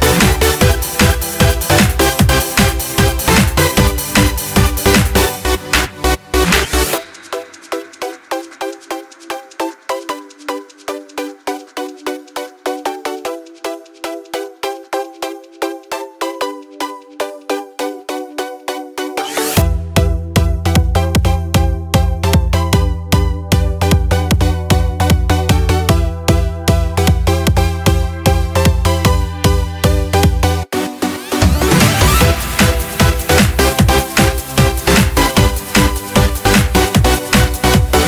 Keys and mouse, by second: 0.9 Delete, 2.1-3.5 middle drag, 3.2 click, 6.0 shift+a, 11.3 drag, 11.5-12.1 middle drag, 12.1 click, 12.3-13.5 middle drag, 13.5 click, 14.5-18.8 drag, 20.7-24.4 drag, 22.8 KP_0, 26.2 click, 27.9 click, 29.2-32.4 drag, 31.0 KP_0, 34.0-35.2 drag, 35.6 click, 36.6-37.9 drag.